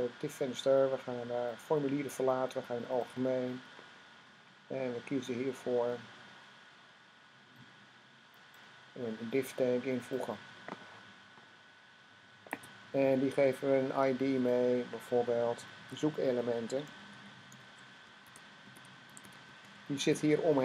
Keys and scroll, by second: 16.2-20.5 typing.